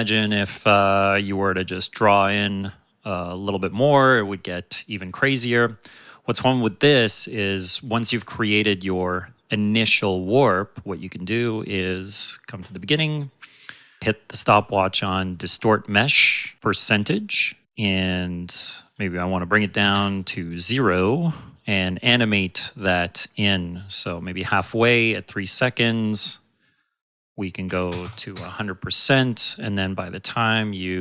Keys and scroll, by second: 5.6 space, 8.6 space.